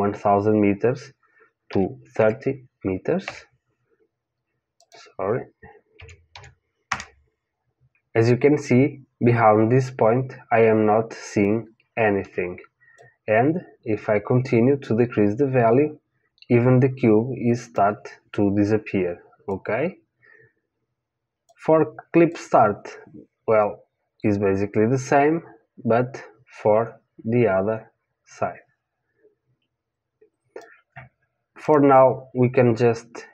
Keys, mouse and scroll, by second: 4.8 click, 12.9 click, 19.5 click, 22.3 click, 31.6-33.3 right drag.